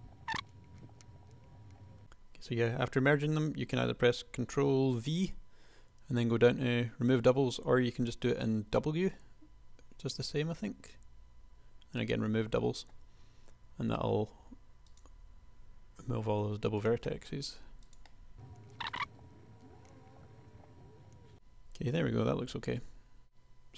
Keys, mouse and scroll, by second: 0.0-1.8 typing, 0.5 click, 0.7 right click, 1.0 click, 4.9 ctrl+v, 8.1 w, 16.1 g, 18.3 g, 18.7 g, 18.9 g, 19.3 click, 20.1 middle click, 20.2 KP_1, 20.4 g, 20.5 a, 20.8 g, 21.0 Tab.